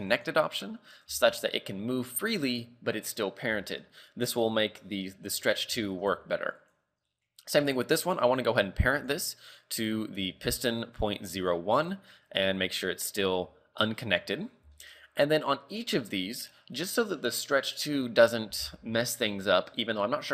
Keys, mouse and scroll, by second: 0.1 click, 0.6-1.1 scroll down 4, 1.1 g, 2.7 scroll up 4, 3.7 shift+middle click, 4.1 scroll up 1, 5.9 shift+middle click, 6.6 right click, 9.0 click, 14.4 scroll down 4, 14.8 shift+middle click, 15.1 scroll up 3, 15.9 right click.